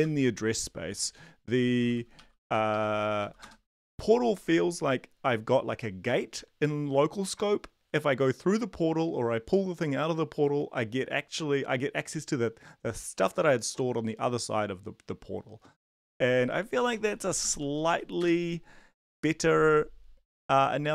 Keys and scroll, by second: 0.0 Return, 1.3-3.7 typing, 16.6-18.4 typing.